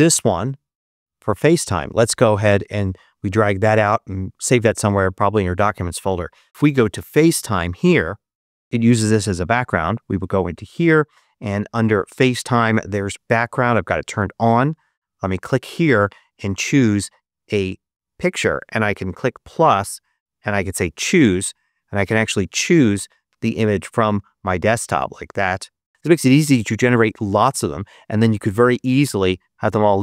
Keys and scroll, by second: 6.5 super+space, 6.8 super+f, 6.8 a, 7.5 Return, 23.6 super+d.